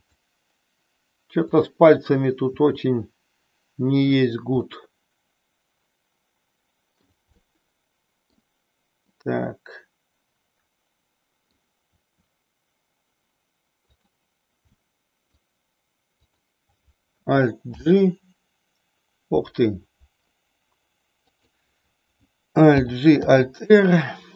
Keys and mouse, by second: 1.4 click, 2.5 r, 4.2 click, 4.6-7.0 middle drag, 7.5-8.5 middle drag, 9.1-11.6 middle drag, 12.0 r, 13.8 click, 14.7 middle click, 16.1 click, 17.7 alt+g, 21.2 click, 22.7 alt+g, 23.2 alt+r.